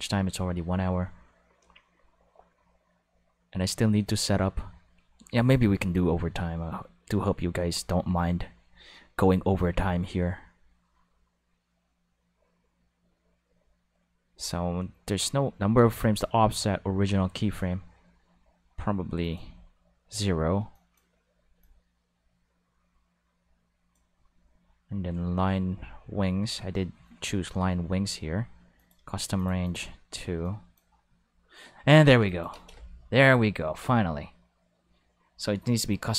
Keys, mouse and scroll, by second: 19.2 click, 20.7 click, 21.1 space, 21.5 space, 21.6-25.8 drag, 28.8 click, 29.4 click, 29.5 2, 29.7 click, 30.4 click, 30.9 space, 32.0 space, 32.3 click, 32.5 space.